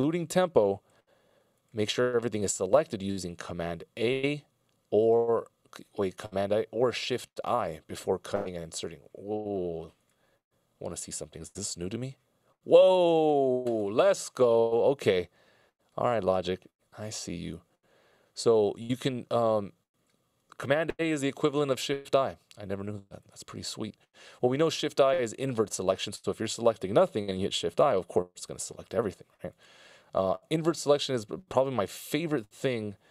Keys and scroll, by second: 12.3 shift+i, 28.3 shift+i.